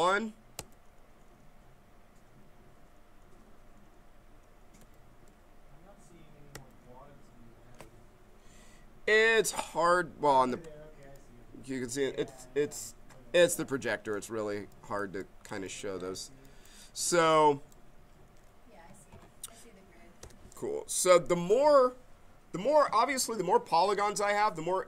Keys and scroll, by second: 0.5 Page_Up, 4.7 Page_Up, 6.5 Page_Up, 20.2 w.